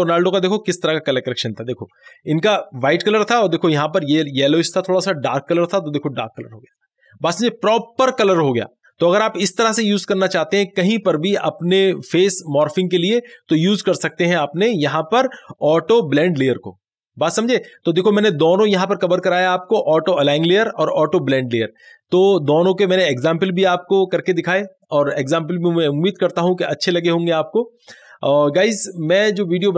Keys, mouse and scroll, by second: 2.0 ctrl+d, 3.8 click, 3.9 click, 14.7 click, 14.8 click.